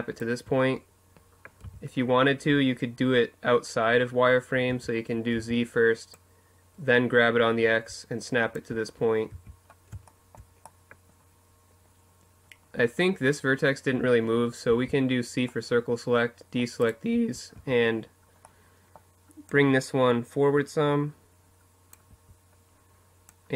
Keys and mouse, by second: 0.3 z, 3.4 z, 4.1 z, 4.8 click, 8.0 z, 11.1 middle click, 13.4 c, 15.9 z, 16.3 z, 17.2-18.2 middle drag, 18.2-20.7 drag, 20.8 z, 22.0-23.5 drag.